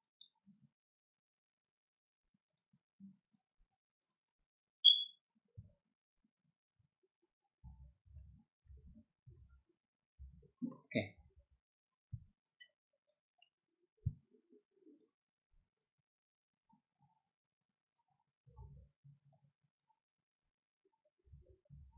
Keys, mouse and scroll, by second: 0.0 click, 2.4 click, 3.2 click, 4.0 click, 7.6 ctrl+z, 11.2 z, 12.4 click, 14.9 click, 16.7-17.9 drag, 18.6 ctrl+z, 19.3-20.3 ctrl+drag, 21.3 ctrl+z.